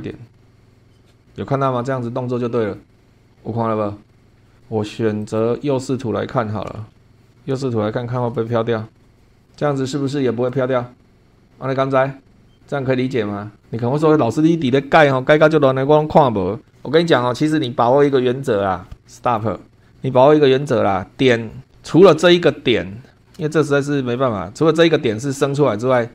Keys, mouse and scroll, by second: 4.3 shift+middle click, 5.2 click, 6.8 shift+middle click, 7.5-8.3 shift+middle drag, 8.5-8.9 shift+scroll down 3, 19.2 click, 19.7 scroll down 2, 19.8 middle click, 20.4-21.9 scroll up 5, 21.9 click, 22.7-23.1 scroll up 1, 23.2 shift+middle click, 23.4-23.7 shift+scroll up 1, 25.9-26.1 scroll down 1.